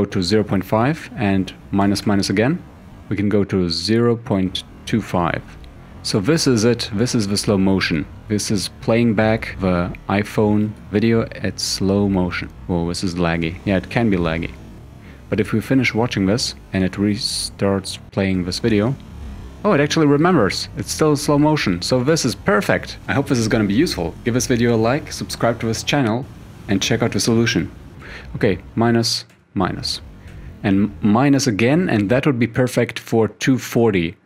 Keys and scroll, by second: 1.9 -, 26.0 =, 27.9 -, 29.4 -, 30.3 -.